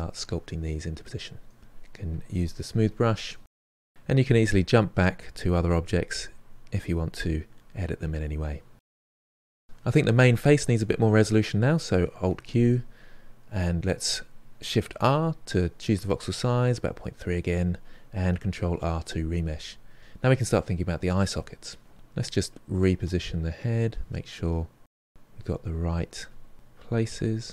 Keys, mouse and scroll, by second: 0.0 shift+click, 0.2 middle click, 0.5 click, 0.6 middle click, 0.7 shift+click, 0.8 middle click, 1.0 click, 1.1 middle click, 1.5 click, 1.6 middle click, 1.8 shift+click, 2.1-3.2 ctrl+middle drag, 3.2 click, 4.0 alt+q, 4.3 click, 5.0 middle click, 5.4 click, 5.8 middle click, 6.1 click, 6.4 middle click, 6.6-8.1 drag, 8.1 middle click, 8.8 click, 9.3 ctrl+middle click, 12.2 alt+q, 14.9 shift+r, 18.4 ctrl+r, 19.1 middle click, 20.7 KP_3, 21.0 ctrl+middle click, 21.5-23.7 drag, 23.7 g, 24.0 f, 24.3-25.9 drag, 25.9-26.9 middle drag, 27.1 KP_3.